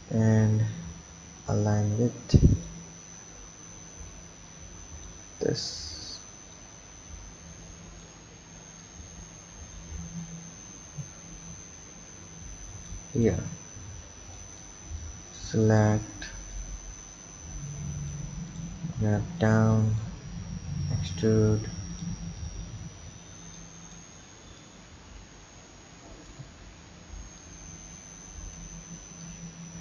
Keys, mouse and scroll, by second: 4.5 click, 5.4 scroll up 1, 6.5 click, 8.8 drag, 13.1 click, 14.0 b, 15.0 click, 16.5 click, 18.5 click, 19.1 b, 20.8 e, 22.4 click, 23.3 b, 24.6 click, 27.4 click, 29.2 click.